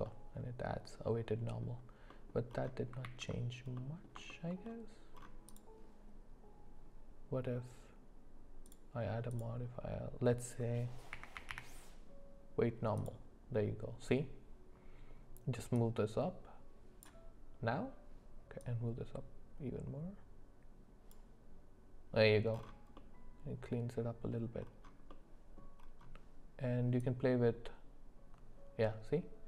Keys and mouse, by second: 0.0-1.6 middle drag, 2.1 middle click, 3.2 ctrl+z, 3.7 middle click, 4.3 shift+middle click, 8.8-13.2 drag, 15.7-17.1 drag, 18.6-21.1 drag, 22.9-24.3 middle drag, 25.1 middle click, 27.1-29.4 drag.